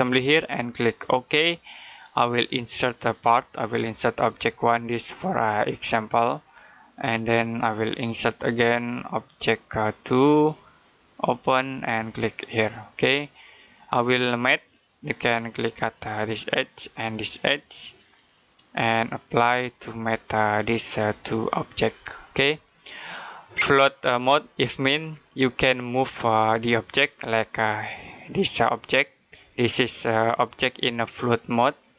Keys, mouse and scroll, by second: 11.5 click, 27.4 click.